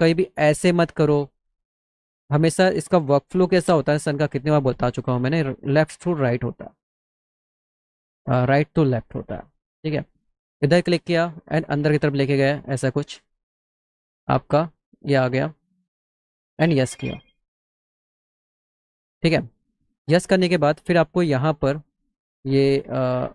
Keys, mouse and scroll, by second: 0.4 click, 1.7 click, 3.6 Delete, 4.6 middle click, 11.1-12.2 drag, 14.2-15.2 drag, 16.8 click.